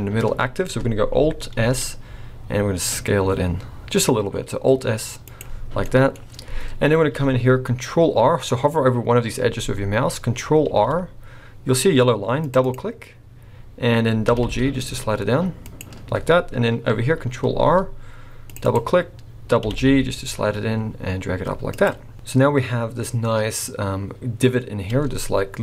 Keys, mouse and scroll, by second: 1.9 alt+s, 5.8 middle click, 10.6 ctrl+r, 14.3 g, 17.5 ctrl+r, 19.6 g, 22.1 scroll down 1, 22.7-23.8 scroll up 1, 24.9 Tab.